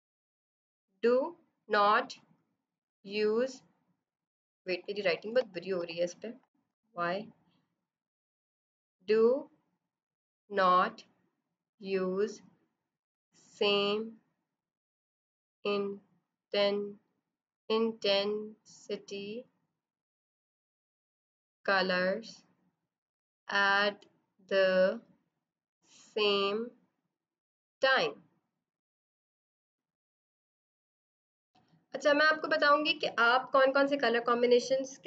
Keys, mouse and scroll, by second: 4.6-5.7 typing, 6.6 ctrl+z, 7.8 click, 31.5 space.